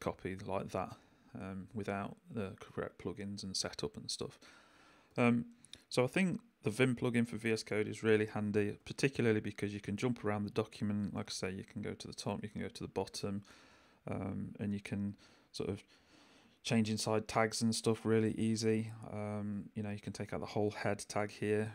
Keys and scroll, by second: 5.1 j, 7.6 j, 8.8-11.9 typing, 13.5-19.1 typing.